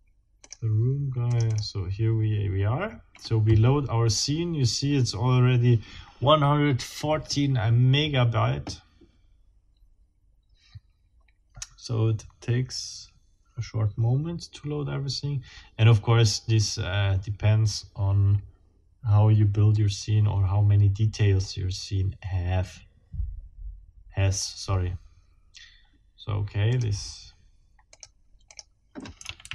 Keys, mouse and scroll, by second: 0.5 click, 1.3 click, 26.7 click.